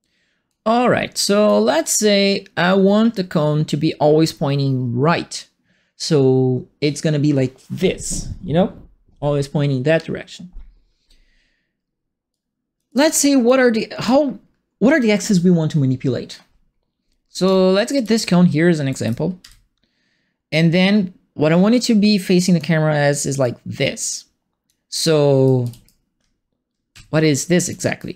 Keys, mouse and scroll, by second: 1.4-3.1 right drag, 12.3 click, 12.8 click, 13.4 click, 17.4 click, 17.7-19.4 typing, 17.9-19.1 right drag, 20.5-22.5 drag, 23.4-24.6 drag, 25.4 right click, 25.6 d, 26.9 w, 27.6 right click, 27.6 d.